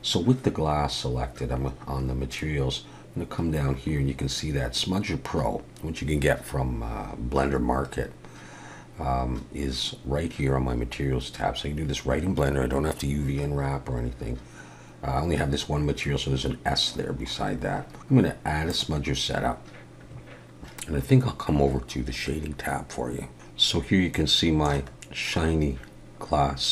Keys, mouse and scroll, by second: 2.9-5.0 scroll down 8, 5.0-7.1 scroll up 1, 16.9-18.7 scroll down 8, 18.7 click.